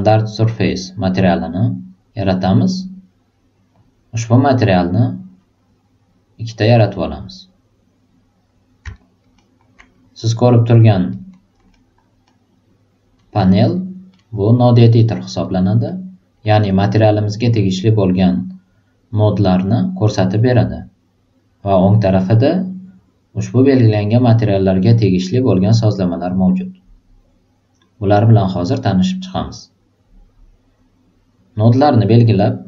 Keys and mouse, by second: 0.6 click, 4.9 click, 6.5-7.4 drag, 8.9 alt+right click, 10.0-10.5 drag, 11.1 alt+right click, 11.3 alt+click, 11.7-13.7 alt+middle drag, 13.7 alt+right click, 14.0 alt+middle click, 14.7 alt+middle click, 15.4 alt+right click, 15.8 alt+middle click, 31.5 click, 31.8-32.3 drag.